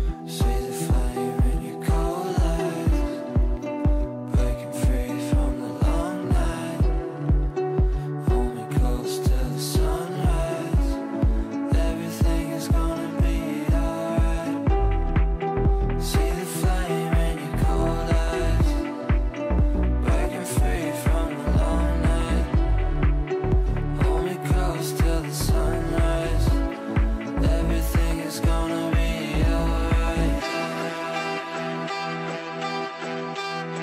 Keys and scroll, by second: 20.4 F3, 20.9 Escape, 27.0 shift+Page_Down.